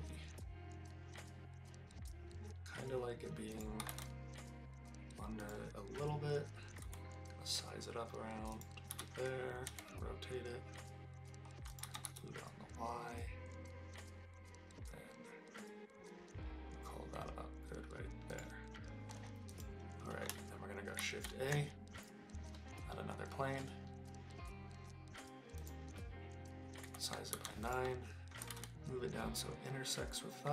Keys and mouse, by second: 3.5 click, 3.8 g, 3.9 z, 5.4 click, 6.8 s, 8.5 click, 8.9 r, 9.7 z, 11.7 click, 11.8 g, 12.0 y, 18.3 click, 21.0 shift+a, 26.8 s, 27.3 9, 27.6 click, 28.4 g, 28.5 z.